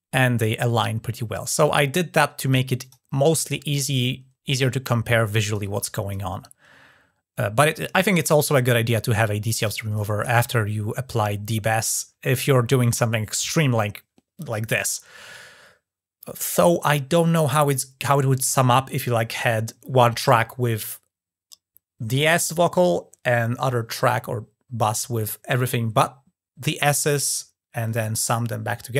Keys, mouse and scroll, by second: 2.6 click, 5.3 click.